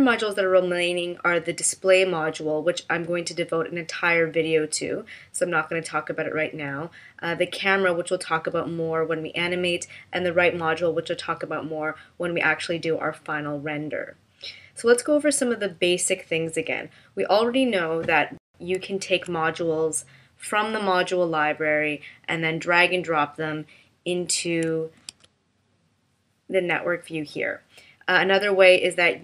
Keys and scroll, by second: 19.0 super+f, 25.1 super+f.